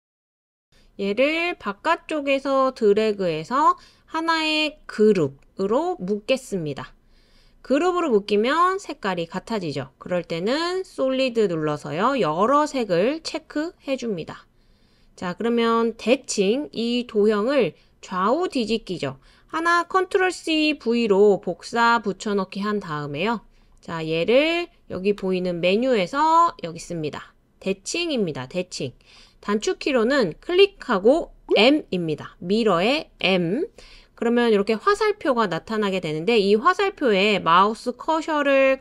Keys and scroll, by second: 20.2 super+c, 20.7 super+v, 33.2 m.